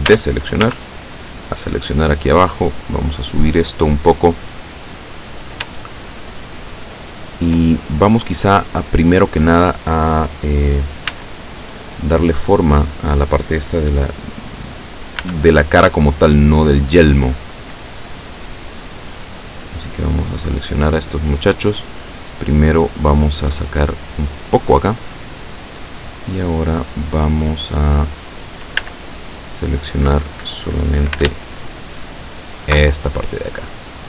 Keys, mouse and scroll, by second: 0.1 a, 0.7 b, 0.9 click, 2.3-5.0 drag, 5.8-7.7 shift+middle drag, 8.0-8.4 scroll up 1, 11.1 a, 12.2 right click, 15.2 b, 16.1-20.7 drag, 21.5-24.7 drag, 25.4 middle click, 26.3-28.0 middle drag, 28.9 a, 32.4 alt+shift+right click, 33.3-34.0 alt+shift+middle drag.